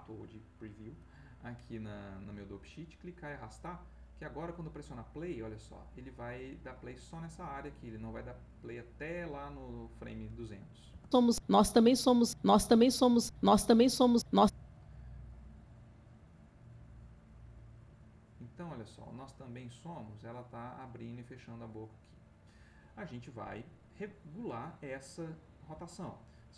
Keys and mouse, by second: 2.9-4.4 drag, 10.9 space, 14.2 Escape, 15.2-22.5 drag.